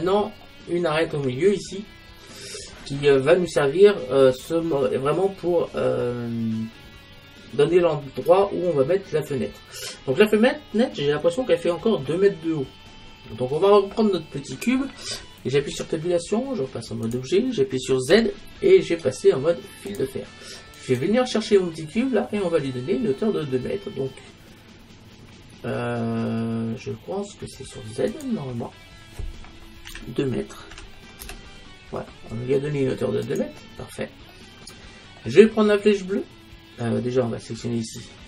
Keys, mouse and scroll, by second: 3.1-3.5 scroll up 1, 3.5-6.1 middle drag, 6.1-6.8 scroll up 1, 10.1-11.9 middle drag, 13.4 middle click, 15.8 Tab, 18.2 z, 20.8-22.6 right drag, 22.3-25.1 middle drag, 28.1-30.0 drag, 33.3-35.2 drag, 34.4-36.2 middle drag, 37.9-38.2 drag.